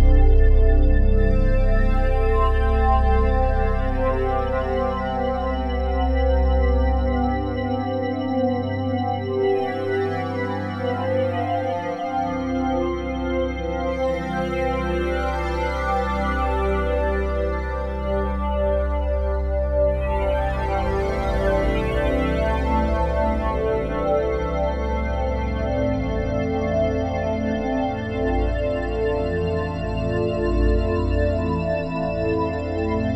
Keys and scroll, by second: 3.0 1, 14.3 F4, 22.1 F4.